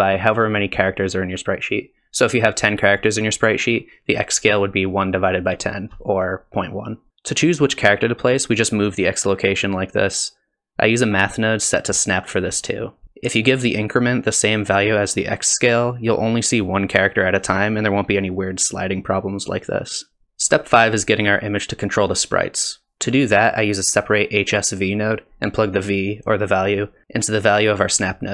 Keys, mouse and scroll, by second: 2.6 middle click, 3.4 click, 9.0 shift+click, 10.6 middle click, 10.6 click, 14.0 click, 14.0 g, 14.8 click, 15.9 shift+click, 18.6 shift+click, 22.3 click, 25.1 middle click, 25.1 scroll down 2, 25.9 click.